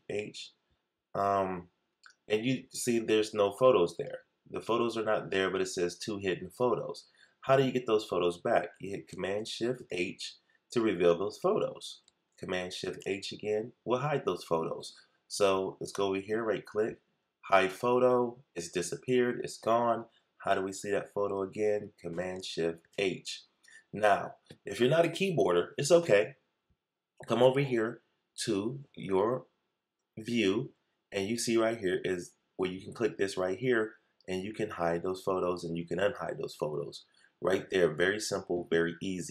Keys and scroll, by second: 9.7 shift+super+h, 12.8 shift+super+h, 22.7 shift+super+h.